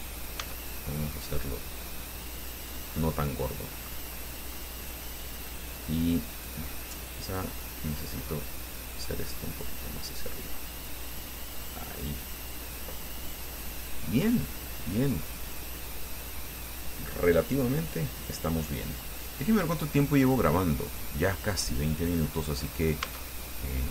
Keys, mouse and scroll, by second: 0.6 s, 2.6 click, 3.6 middle click, 4.8 middle click, 6.7 click, 7.5 right click, 7.8 middle click, 9.3-11.5 drag, 11.8 middle click, 13.0 scroll down 1, 13.4-15.3 middle drag, 15.7 scroll down 1, 16.3-19.1 middle drag, 19.9 click, 21.1 click, 22.0 middle click, 22.8-23.1 scroll up 1, 23.2 Tab, 23.7 middle click.